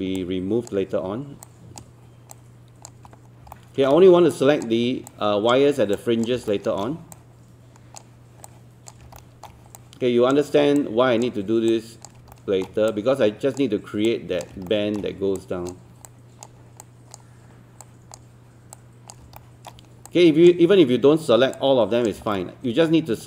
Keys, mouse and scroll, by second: 0.2 shift+click, 1.5 shift+click, 2.3 shift+click, 3.5 alt+middle click, 4.3 shift+click, 5.1 shift+click, 6.0 shift+click, 6.5 alt+middle click, 7.1 shift+click, 8.5 shift+click, 9.2 shift+middle click, 9.8 shift+click, 10.8 shift+click, 11.7 shift+click, 12.3 alt+middle click, 12.9 shift+click, 14.1 shift+click, 14.7 alt+middle click, 15.4 shift+click, 16.1 shift+click, 16.8 shift+click, 17.9 shift+click, 18.7 shift+click, 19.4 alt+middle click, 20.1 shift+click, 21.5 shift+click, 22.3 alt+shift+middle click.